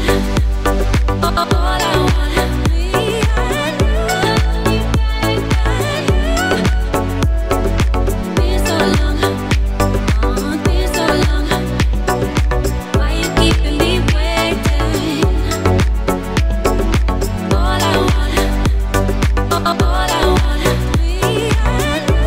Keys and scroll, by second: 3.9 Tab, 19.6 g, 20.2 z.